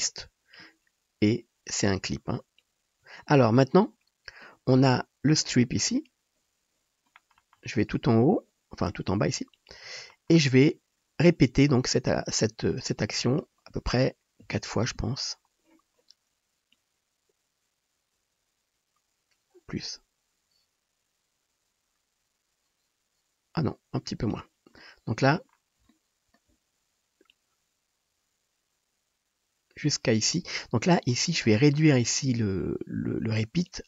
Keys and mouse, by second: 6.0-9.6 middle drag, 9.6-33.8 drag.